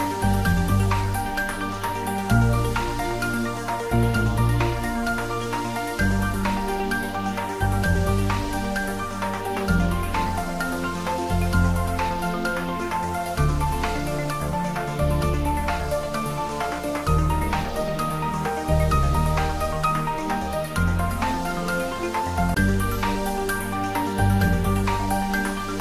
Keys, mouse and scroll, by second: 0.0 click, 2.0 click, 3.0-4.4 middle drag, 4.4 click, 4.9 scroll up 1, 5.6 click, 8.3 scroll down 1, 8.7-12.0 middle drag, 12.0 ctrl+j, 12.7-13.5 scroll up 1, 14.0-15.8 middle drag, 15.8 Tab, 16.3 scroll up 1, 16.9 middle click, 17.6-18.0 scroll down 1, 18.0 middle click, 19.0-19.6 scroll up 1, 20.4 click, 21.4 2, 21.9 click, 23.0-24.9 middle drag, 24.9 click, 25.6-25.8 middle drag.